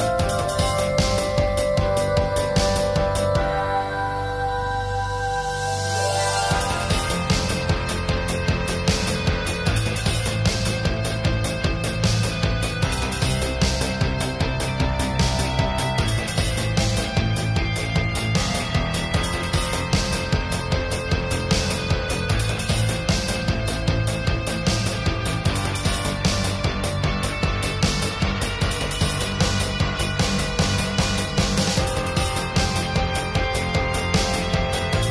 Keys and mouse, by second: 0.2 s, 0.8 Tab, 1.7 click, 2.0 e, 2.7 middle click, 3.5 e, 3.9 s, 4.4 click, 4.6 middle click, 5.0 s, 5.3 click, 5.5 e, 6.4 s, 7.0 middle click, 7.8 middle click, 8.0 middle click, 8.2 click, 8.4 middle click, 8.6 ctrl+s, 8.8 click, 9.0 middle click, 9.6 middle click, 9.9 right click, 10.4 a, 10.7 click, 11.0 click, 11.1 middle click, 11.7 click, 11.9 middle click, 12.1 middle click, 12.4 middle click, 13.2 middle click, 13.4 ctrl+s, 14.8 middle click, 15.8 click, 16.8 right click, 16.9 click, 19.0-20.0 drag, 19.9 ctrl+s, 20.3-21.6 drag, 21.9 click, 23.7 ctrl+s, 23.9-24.4 drag, 24.5 right click, 24.8-25.3 drag, 25.4-25.8 drag, 25.8 middle click, 25.9-26.4 right drag, 26.7 click, 27.1 click, 27.4-28.5 middle drag, 29.0-30.0 drag, 31.0 click, 34.4 click, 34.8 ctrl+s.